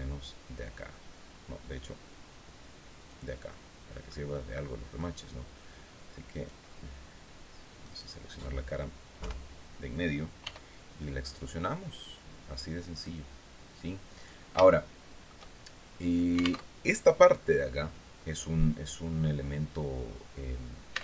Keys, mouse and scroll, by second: 2.6 click, 3.0 middle click, 3.8 middle click, 5.8 click, 7.3 right click, 8.7 KP_3, 9.9 e, 12.4 click, 13.4-13.8 scroll down 2, 14.1 shift+middle click, 16.1 alt+Tab, 20.7 alt+Tab.